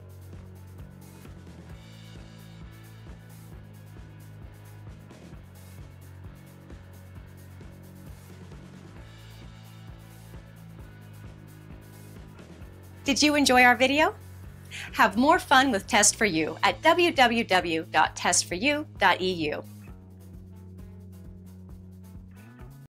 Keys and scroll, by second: 0.0 shift+Down, 10.9 Return.